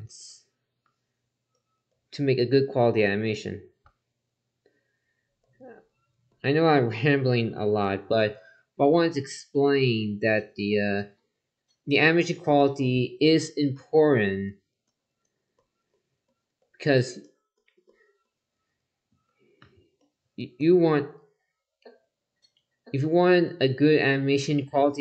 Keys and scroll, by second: 13.7 ctrl+z.